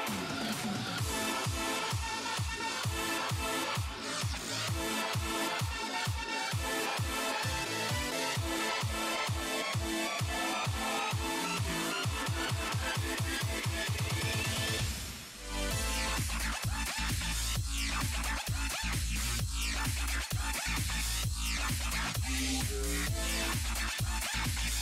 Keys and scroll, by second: 2.3 s, 2.8 s.